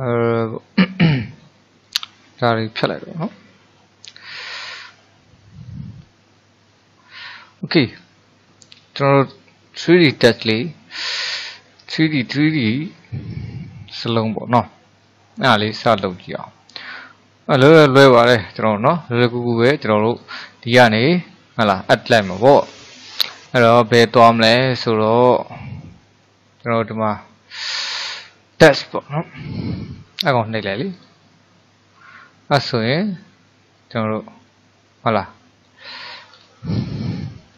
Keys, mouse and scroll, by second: 0.1 middle click, 1.1 click, 1.5 click, 3.3 Delete, 4.3-7.7 middle drag, 7.7-8.2 scroll up 1, 8.2 shift+middle click, 8.8-9.3 scroll up 2, 9.3-15.4 middle drag, 20.1-23.3 drag, 33.8-36.3 middle drag, 36.3-37.2 scroll up 4, 37.2-37.5 shift+middle drag.